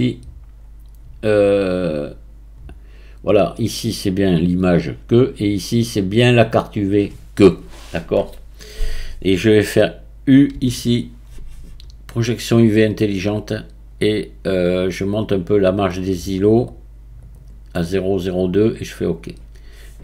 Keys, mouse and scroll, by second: 0.0-0.6 scroll down 1, 0.6-4.5 scroll down 10, 5.5-7.4 scroll down 1, 10.8 u.